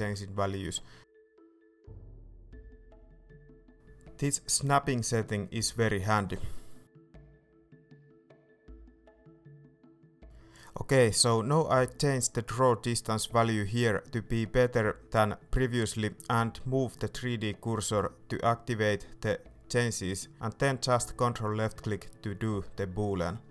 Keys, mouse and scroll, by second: 7.7-11.5 shift+middle drag, 11.5-18.1 drag, 21.0-22.0 ctrl+drag, 22.0-23.5 middle drag.